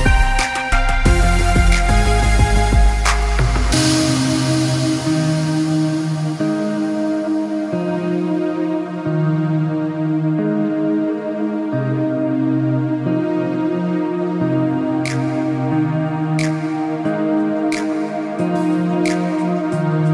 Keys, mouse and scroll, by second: 2.1 click, 8.6 click, 10.4 click, 15.7 click.